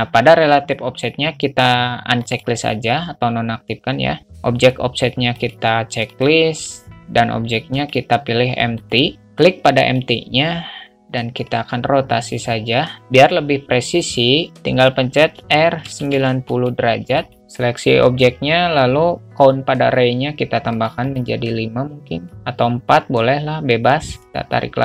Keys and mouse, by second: 2.5 click, 5.7 click, 6.4 click, 8.1-9.2 drag, 10.1 click, 11.8-14.5 drag, 15.7 r, 21.2 click, 24.3-24.8 drag.